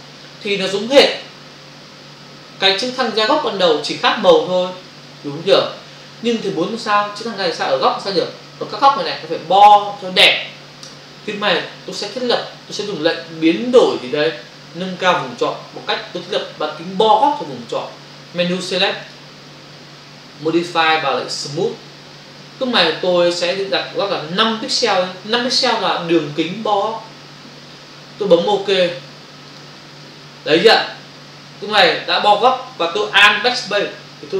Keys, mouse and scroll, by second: 19.1 click, 21.3 click, 22.4 click, 29.4 click.